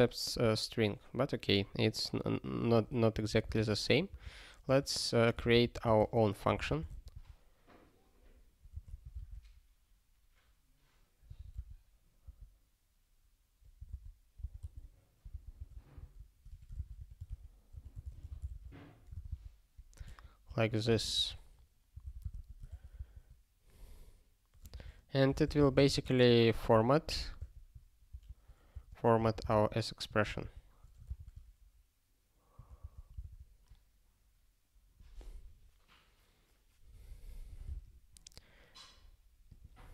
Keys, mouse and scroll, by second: 0.1 click, 2.6 click, 3.1 Return, 3.3 ctrl+p, 3.5 Return, 3.8-6.8 typing, 11.6 x, 12.3 p, 13.9 alt+b, 14.4 alt+b, 14.6 alt+d, 15.5 ctrl+e, 15.9-19.0 typing, 19.2 alt+b, 19.2 alt+b, 20.0 alt+f, 20.5 alt+f, 20.9-22.8 typing, 23.0 Return, 24.7-27.4 typing, 28.1 ctrl+f, 28.7-30.0 typing, 30.5 ctrl+g, 31.2 ctrl+s, 32.8 ctrl+n, 39.5 click.